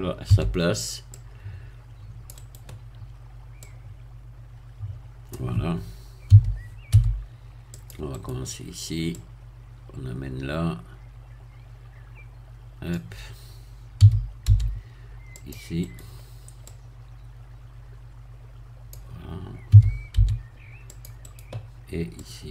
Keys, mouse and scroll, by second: 0.3 c, 1.1-2.7 drag, 2.4 right click, 3.6-6.3 drag, 6.3 a, 6.9 c, 7.7 click, 8.1 right click, 9.1-13.1 drag, 14.0 a, 14.4 c, 15.4 click, 15.9 right click, 16.7-19.1 drag, 19.7 a, 20.1 c, 20.9 click, 21.4 right click, 22.2-22.5 drag.